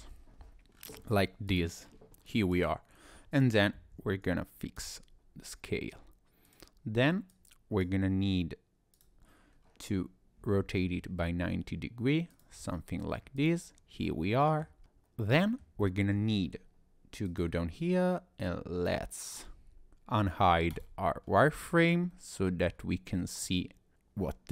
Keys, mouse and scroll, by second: 0.7-1.5 scroll down 5, 1.5 click, 1.9-2.3 scroll up 2, 2.3 click, 3.8 ctrl+a, 6.5 click, 7.3 click, 8.9 click, 9.5-10.5 scroll down 1, 10.6 r, 12.7 middle click, 13.4 click, 13.6-14.0 scroll down 2, 14.0 middle click, 14.8 shift+middle click, 14.8-15.3 scroll up 3, 15.3 middle click, 15.8 shift+middle click, 16.4-16.8 scroll up 1, 17.3 click, 21.2 scroll down 1, 21.7 middle click, 23.4 middle click.